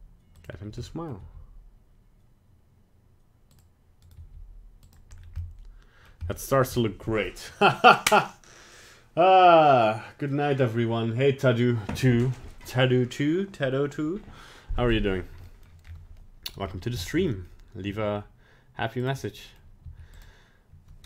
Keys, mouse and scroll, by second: 0.5 scroll down 1, 0.8 middle click, 1.2 g, 4.1 right click, 4.1 g, 5.1 scroll down 2, 5.4 middle click, 6.3 middle click, 6.5 middle click, 15.4 middle click, 15.8-16.9 scroll up 3, 16.2 middle click, 17.0 shift+middle click, 17.4 middle click, 17.9 g, 19.1 middle click, 19.5 middle click, 19.8 g.